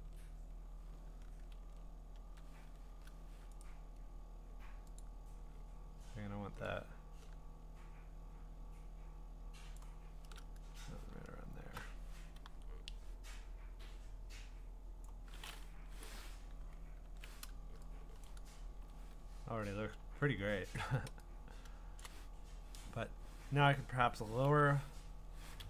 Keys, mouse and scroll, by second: 1.6 ctrl+z, 2.2 ctrl+z, 3.0 ctrl+t, 3.6 right click, 5.0 click, 9.8 shift+click, 10.6 Return, 11.3-12.5 scroll, 12.5 m, 15.0 click, 17.0 ctrl+d, 18.0-18.3 scroll, 18.3 click, 18.7 ctrl+h, 19.3-19.6 scroll, 20.0-20.9 scroll, 22.0 scroll, 22.0 click, 24.5 ctrl+i.